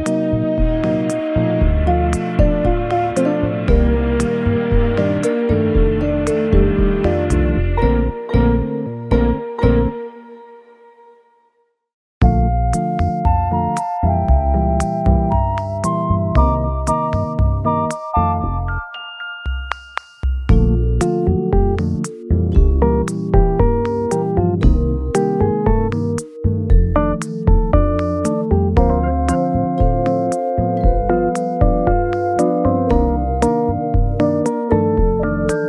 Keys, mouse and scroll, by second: 2.8 scroll up 1, 4.9 scroll up 1, 5.0-5.6 scroll down 4, 6.2-9.4 scroll down 15, 9.4-10.9 scroll down 5, 11.8 ., 11.9 2, 15.0 ., 15.6 3, 21.8-22.3 scroll down 3, 22.4-23.6 scroll up 3, 24.4-26.8 scroll down 10, 26.9 ., 27.5 5, 27.5 Return.